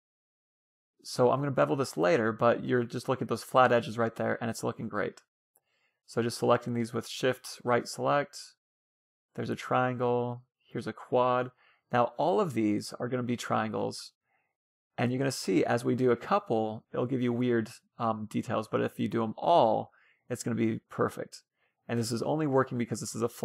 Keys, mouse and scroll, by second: 0.6-2.2 middle drag, 2.4 middle click, 3.9 Tab, 5.2 middle click, 5.2-12.2 right drag, 6.5 f, 11.0 f, 11.2-14.3 middle drag, 15.0-23.4 right drag, 15.9 f, 17.3 f, 18.5 f, 20.2 f, 22.1 f.